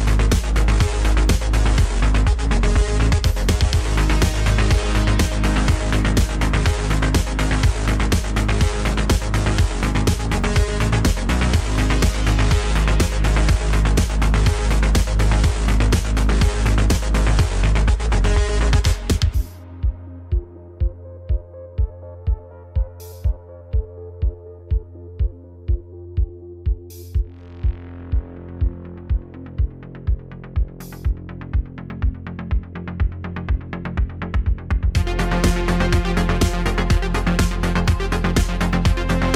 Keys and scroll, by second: 0.0 Tab, 1.4 Tab, 2.0 e, 2.7 x, 3.0 y, 3.6 x, 4.9 g, 5.9 z, 6.7 y, 7.1 x, 9.3 e, 9.7 x, 11.9 g, 12.7 g, 15.5 e, 17.2 g, 20.4 Tab, 20.9 shift+a, 21.7 s, 23.6 Tab, 24.5 g, 25.2 shift+z, 26.9 g, 27.4 shift+z, 32.7 Tab, 33.2 Tab, 34.1 g, 34.3 shift+z, 35.8 e, 36.9 shift+z, 37.8 g.